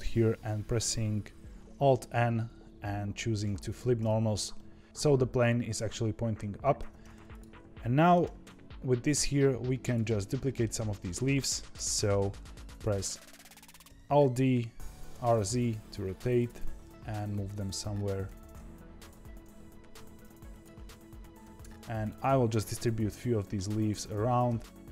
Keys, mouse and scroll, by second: 1.8 alt+n, 3.6 Escape, 4.5 middle click, 6.7 Tab, 7.2 click, 7.9 middle click, 8.2 g, 10.1-11.7 middle drag, 11.7 KP_7, 13.8 alt+d, 16.5 g, 18.2 alt+d, 19.2 r, 21.4 alt+d, 24.4 r.